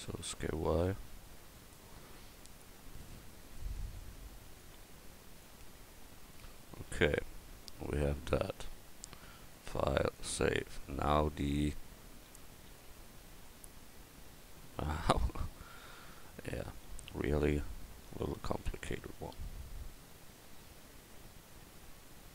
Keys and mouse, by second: 2.3-3.8 drag, 3.7 middle click, 4.1-5.8 middle drag, 4.6 click, 6.9 a, 11.5 KP_1.